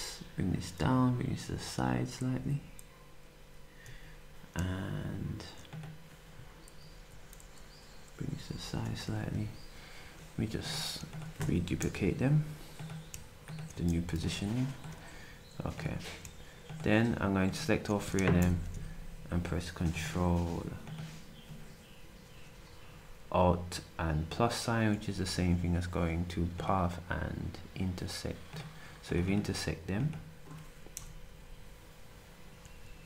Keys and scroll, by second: 11.8 Delete, 14.0 d, 18.4 =, 24.9 s, 30.9 Delete.